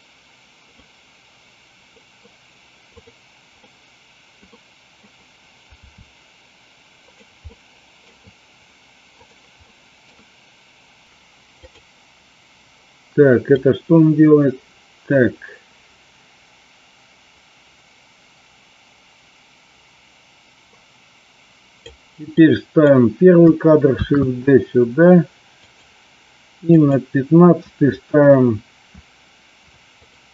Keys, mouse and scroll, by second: 0.8-2.1 middle drag, 3.5 middle click, 4.5 middle click, 7.0 click, 7.5 middle click, 9.6 middle click, 10.0 scroll down 2, 11.6 click, 13.5-21.8 drag, 22.3-22.9 drag, 24.0 shift+d, 26.6 click, 30.0 click.